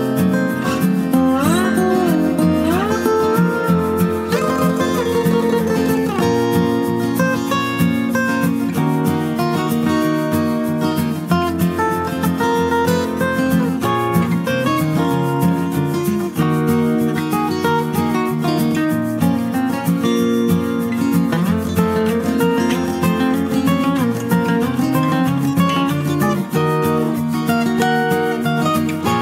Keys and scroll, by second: 21.4-23.0 typing, 25.8-29.2 typing.